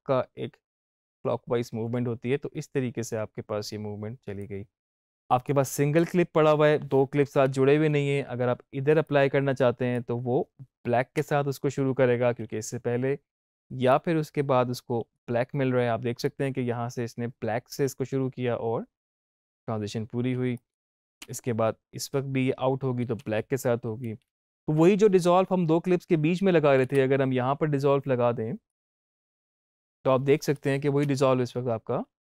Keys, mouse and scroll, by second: 4.9 Up, 5.3-7.3 drag, 7.3 Up, 9.0-11.1 drag, 11.1 space, 13.8-17.8 drag, 17.8 space, 20.2 space, 20.5 click, 21.1 space, 24.0 z, 26.7 Up, 28.6-30.3 drag, 30.9 space.